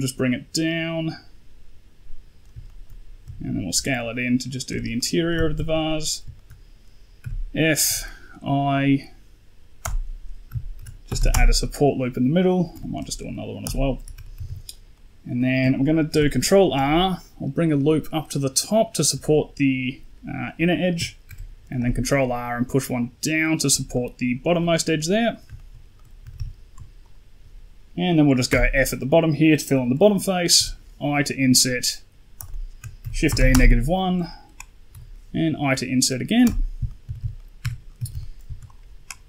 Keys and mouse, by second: 2.5 shift+middle click, 3.1 s, 4.8 middle click, 5.2 z, 5.5 shift+middle click, 5.7 middle click, 6.2 shift+middle click, 7.1 f, 7.7 i, 10.6 shift+e, 12.6 i, 14.2 a, 14.3 a, 14.8 middle click, 15.9 ctrl+r, 21.1 ctrl+r, 23.8 middle click, 24.7 middle click, 25.1 middle click, 25.4 shift+middle click, 25.8 middle click, 26.1 a, 26.6 a, 26.9 alt+click, 28.4 f, 28.9 middle click, 30.4 i, 32.9 shift+e, 34.8 i, 36.7 middle click, 36.9 a, 37.1 a, 37.2 middle click, 37.5 Tab, 37.9 a, 38.0 a, 38.1 middle drag, 38.5 right click.